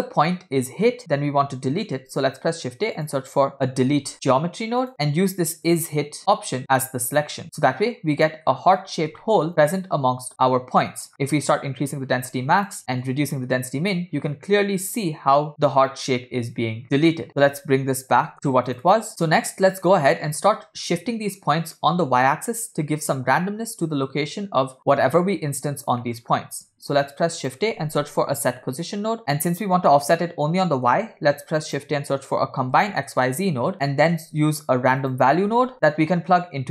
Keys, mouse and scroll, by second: 2.1 shift+a, 5.7-7.3 drag, 7.4-8.5 middle drag, 8.6 scroll up 2, 9.3 shift+middle click, 10.8 middle click, 11.5-12.8 drag, 13.1 click, 17.3-18.8 drag, 17.3 scroll up 1, 18.9 click, 19.1 middle click, 19.1 scroll up 2, 20.3-20.7 middle drag, 21.1 scroll down 2, 21.6 middle click, 26.1 middle click, 26.3 scroll up 2, 26.7 shift+a, 30.2 middle click, 31.1 shift+a, 33.9 middle click, 34.3 shift+a, 35.9 scroll up 2.